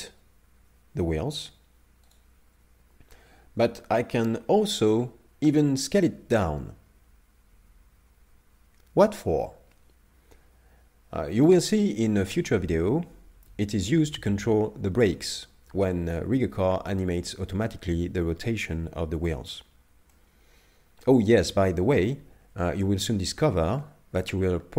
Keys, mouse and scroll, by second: 5.9 s, 20.1 middle click.